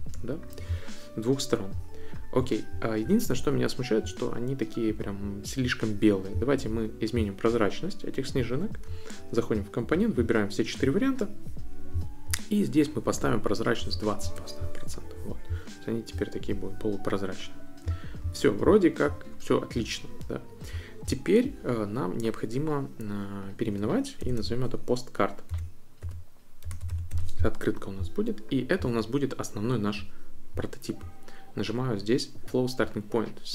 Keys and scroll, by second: 13.5-14.5 typing, 23.9-27.6 typing.